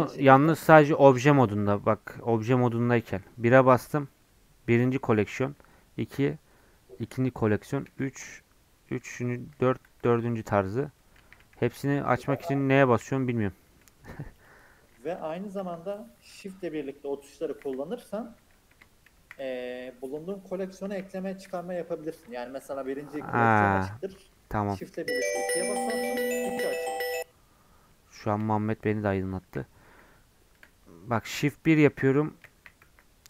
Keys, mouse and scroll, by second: 5.6 2, 9.0 4, 9.6 3, 9.9 4, 11.2-13.7 typing, 15.6 0, 16.8 3, 17.4 1, 19.1 shift+1, 19.8 shift+3, 20.1 shift+4, 20.8 shift+1, 22.6 shift+1, 23.7 shift+2, 24.3 shift+4, 24.7 shift+1, 25.8 shift+4, 28.2 shift+1, 29.4 shift+1, 29.8 shift+3, 31.4-33.2 typing.